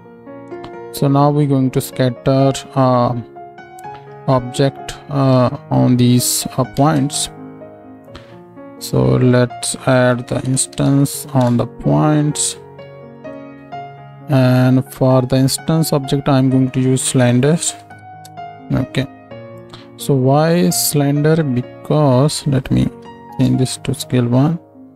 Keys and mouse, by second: 0.8-5.3 middle drag, 6.8 ctrl+space, 12.3-13.5 drag, 13.5 shift+e, 19.6-22.6 drag.